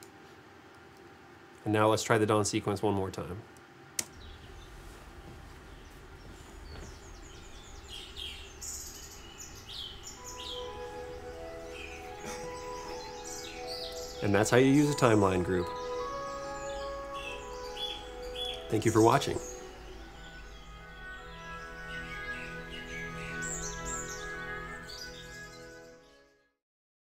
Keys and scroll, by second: 4.1 space.